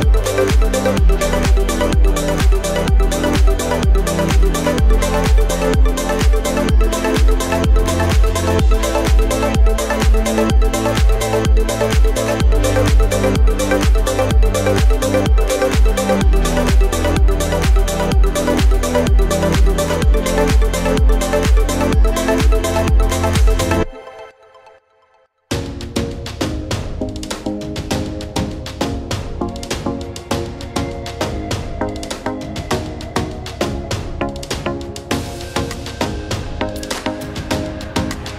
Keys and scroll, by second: 5.5 v.